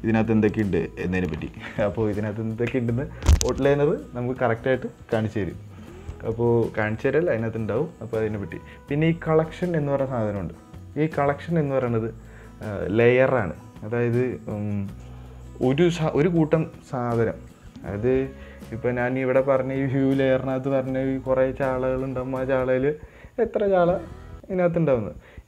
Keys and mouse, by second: 0.0 click, 0.8 click, 1.5 click.